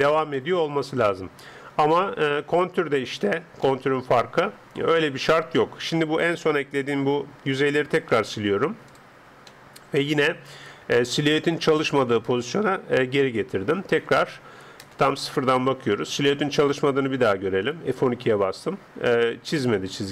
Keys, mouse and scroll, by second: 0.0 Escape, 0.4-6.8 middle drag, 4.7 Tab, 8.1 x, 9.5-11.4 middle drag, 13.2-14.8 middle drag, 14.1 Tab, 14.8 KP_0.